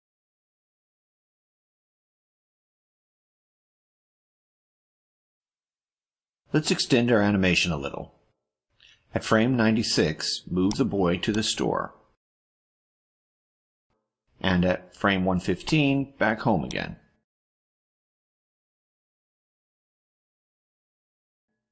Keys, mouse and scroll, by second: 1.7 click, 3.1 click, 5.6 click, 6.8 click, 10.7-12.3 drag, 13.0 click, 14.2 click, 15.6-17.0 drag, 18.0 click, 19.4-21.7 drag.